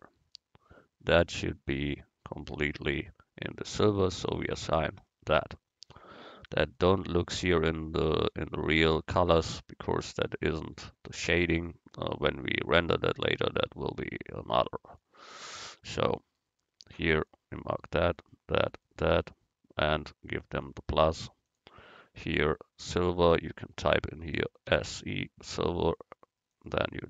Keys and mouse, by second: 4.2-5.3 drag, 5.4 Tab, 10.2-13.5 right drag, 13.5-14.7 middle drag, 15.8 Tab, 20.6-23.4 drag.